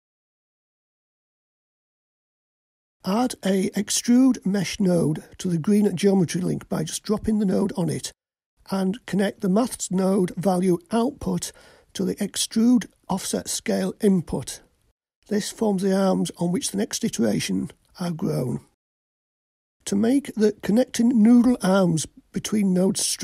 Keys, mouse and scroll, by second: 0.3-2.1 drag, 3.1 click, 4.9-10.2 drag, 12.0-15.1 drag, 15.4-16.7 drag.